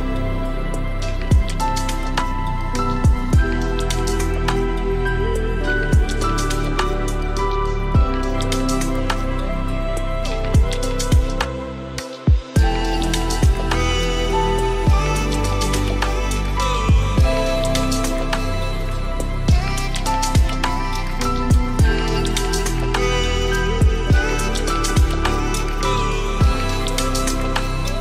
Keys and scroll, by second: 4.4 ctrl+space.